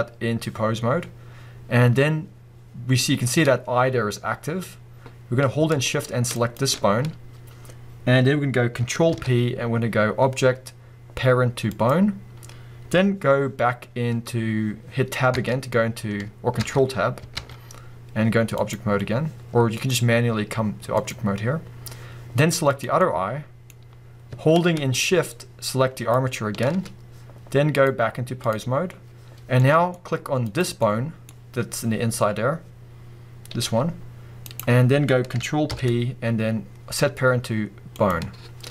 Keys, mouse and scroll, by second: 9.1 ctrl+p, 15.4 Tab, 16.6 ctrl+Tab, 19.8-22.8 drag, 23.0-25.9 middle drag, 25.9 shift+click, 27.7-29.6 drag, 29.6-30.4 middle drag, 30.4 click, 30.8-34.6 middle drag, 31.3 scroll up 1, 32.4-33.6 scroll down 2, 33.6 g, 34.6 right click, 35.7 ctrl+p, 38.6 scroll down 2.